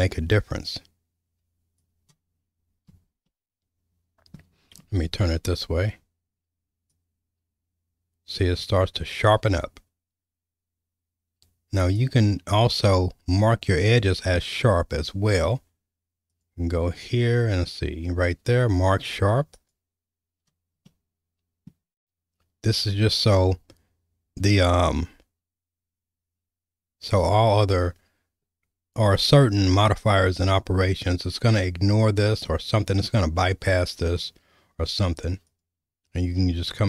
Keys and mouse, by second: 3.3-4.4 middle drag, 7.1-12.0 drag, 16.4-19.8 drag, 20.8 middle click, 32.5-34.0 middle drag, 35.4-36.8 drag.